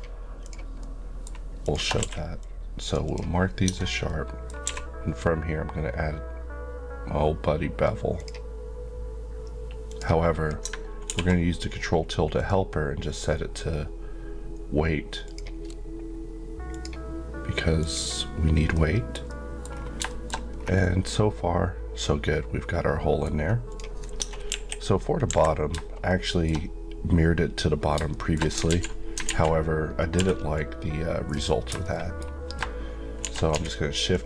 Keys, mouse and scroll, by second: 0.8 shift+middle click, 1.6 shift+click, 2.0 q, 2.4 click, 3.1 Left, 3.7 Tab, 4.1 middle click, 4.6 q, 8.1 click, 12.3 click, 18.7 middle click, 19.7 scroll down 1, 20.1 shift+middle click, 20.5 scroll down 1, 20.8 middle click, 23.7 click, 24.2 Tab, 24.5 KP_1, 26.1 shift+middle click, 28.1 shift+middle click, 28.4 scroll up 1, 28.7 alt+z, 29.3 alt+a, 30.2 b, 30.5 click, 31.8 shift+middle click, 33.2 shift+d, 33.5 z, 34.1 click.